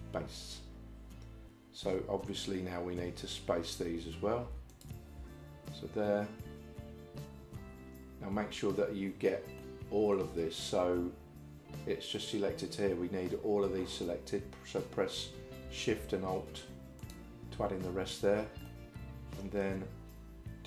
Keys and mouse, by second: 4.8 alt+click, 9.6 shift+middle click, 18.7 middle click.